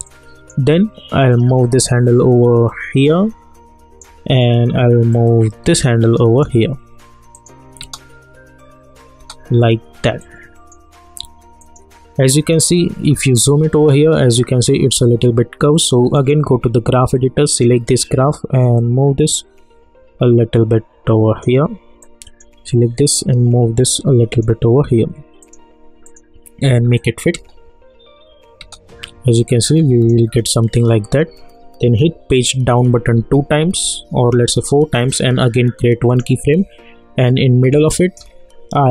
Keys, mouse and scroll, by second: 0.0-5.1 drag, 5.1-7.3 drag, 7.8 space, 10.2-11.6 drag, 12.9-13.7 alt+scroll up 1, 16.2-25.4 drag, 27.3 space, 29.5-32.7 drag, 32.7 Page_Down, 36.1 click, 36.1 -, 37.3-38.9 drag.